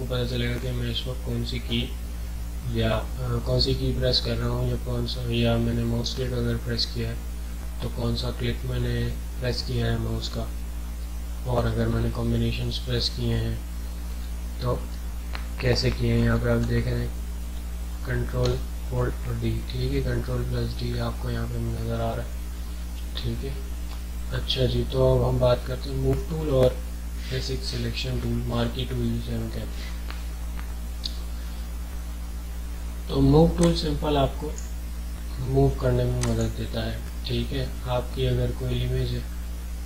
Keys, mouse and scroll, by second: 14.3 ctrl+d, 16.3 ctrl+d, 17.4 ctrl+d, 18.5 ctrl+d, 33.6-36.2 drag.